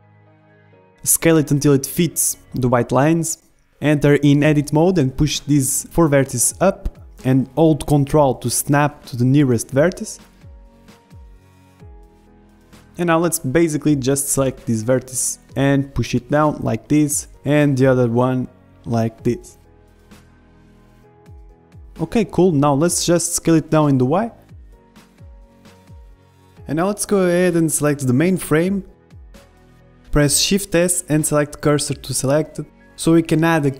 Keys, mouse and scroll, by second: 0.1-2.3 middle drag, 0.8 s, 2.6 middle click, 2.9 middle click, 3.5 s, 5.1 Tab, 5.4 a, 5.6 b, 6.7-13.2 drag, 11.0 a, 11.2 b, 12.2 z, 13.2 middle click, 13.4 a, 13.7 b, 14.9-16.8 drag, 17.9 a, 18.1 b, 19.1-20.7 drag, 21.6-24.7 middle drag, 21.8 z, 22.7 Tab, 23.8 s, 25.6-26.7 middle drag, 27.2-29.0 middle drag, 28.8 Delete, 29.0-30.0 drag, 29.9 shift+s, 30.0-33.7 middle drag.